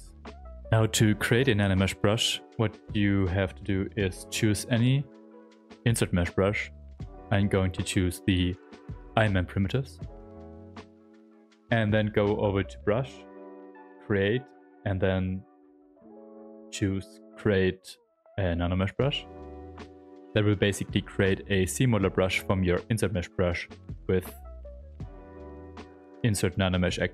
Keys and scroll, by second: 4.8 ctrl+b, 25.1 space.